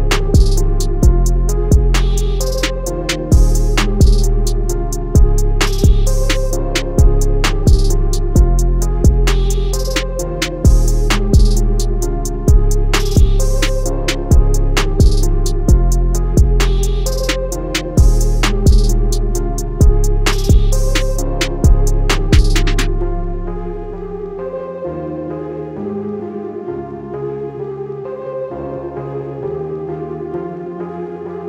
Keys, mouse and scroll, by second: 2.8 click, 4.3 ctrl+z, 5.1 z, 6.5 click, 10.6 Escape, 11.5 click, 18.4 Escape, 19.8 Caps_Lock, 19.8 click, 23.2 Escape, 24.9 Caps_Lock, 27.0 click, 29.4 click.